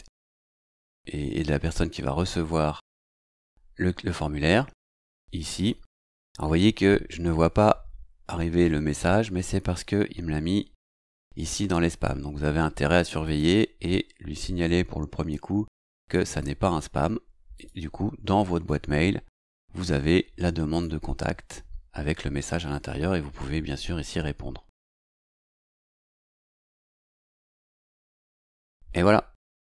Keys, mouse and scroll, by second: 5.5 click, 10.7 click, 13.2 click, 16.2 click, 17.5 click, 20.7 click, 27.3 click.